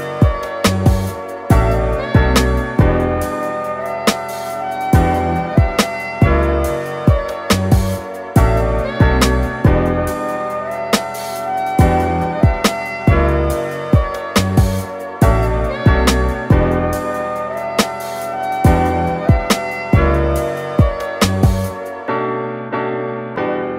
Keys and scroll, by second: 19.2 super+-, 20.1 w, 20.6 |.